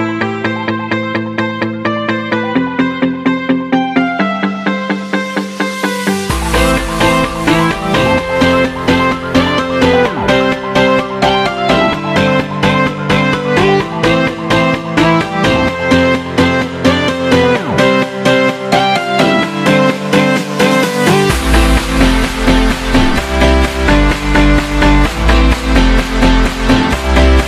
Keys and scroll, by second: 0.3 alt+super+z, 0.9 alt+super+z, 2.6 shift+super+z, 21.8 alt+super+z, 22.4 alt+super+z, 22.9 alt+super+z, 23.2 alt+super+z, 23.6 alt+super+z, 23.9 alt+super+z.